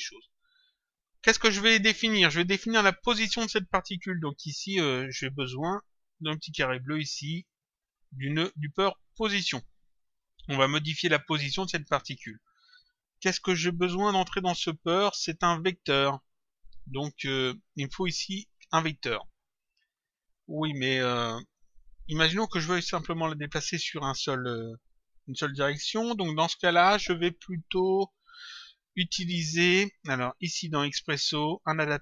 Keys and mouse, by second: 0.5 click, 4.9 click, 9.1 click, 31.4 click.